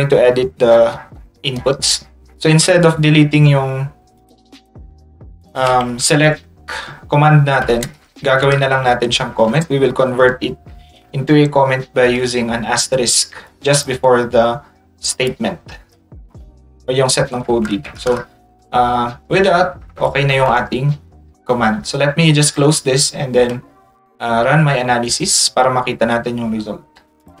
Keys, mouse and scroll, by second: 1.1 middle click, 2.0 middle click, 4.2 click, 4.5 click, 5.5 click, 13.5 click, 15.3 click, 18.6 ctrl+s, 19.6 ctrl+s, 22.5 click.